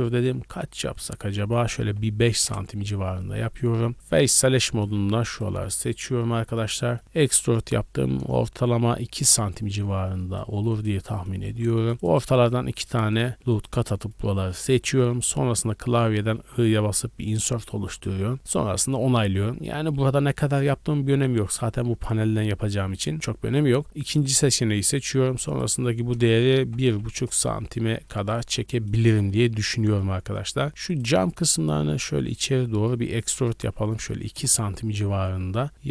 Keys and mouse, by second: 3.9 3, 4.5 a, 4.8 a, 5.1 alt+middle click, 5.2 alt+click, 5.4-7.1 alt+middle drag, 7.1 e, 10.5 3, 10.8 click, 11.5 ctrl+r, 11.9 ctrl+r, 11.9 middle click, 12.4 3, 12.7 click, 12.8 shift+middle click, 13.1 shift+click, 13.2 shift+middle click, 13.5 shift+click, 13.6 shift+middle click, 14.2 click, 14.5 middle click, 16.5 i, 20.6-21.4 drag, 24.1-24.7 drag, 25.4 click, 29.0 3, 29.4 a, 29.6 a, 30.3 middle click, 31.7 e, 34.3-35.9 drag.